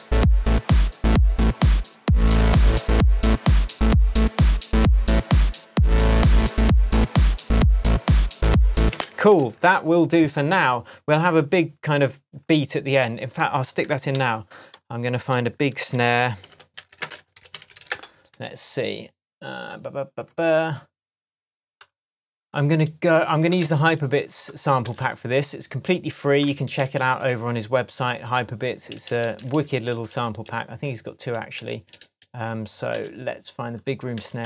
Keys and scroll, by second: 8.9 space, 9.4 super+s, 14.1 super+t, 15.8 super+r, 16.4 shift+super+b, 16.5-18.1 typing, 18.9 Return, 23.6 Right, 24.8 Right, 26.7 Right, 28.9 Up, 34.1 Right.